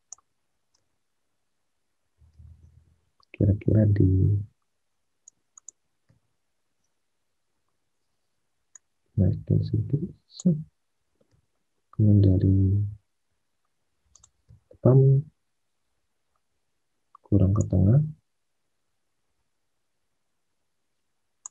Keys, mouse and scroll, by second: 0.7 space, 6.0 space, 11.2 space, 14.4 space.